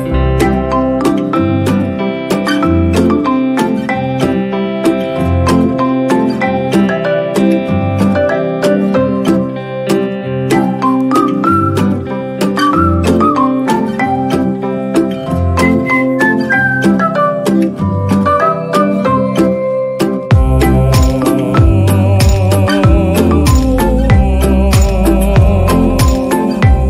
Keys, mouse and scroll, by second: 6.9 right click, 7.1 right click, 8.1 right click, 8.3 right click, 8.9 ctrl+=, 9.5 right click, 9.9 right click, 11.1 right click, 13.4 ctrl+=, 13.6 ctrl+=, 13.8 right click, 15.2 ctrl+-, 15.9 right click, 20.3 ctrl+-, 20.3 ctrl+=, 20.8 ctrl+-, 21.0 ctrl+=, 22.5 ctrl+-, 22.8 ctrl+=, 23.0 ctrl+-, 24.2 ctrl+-, 24.7 ctrl+=.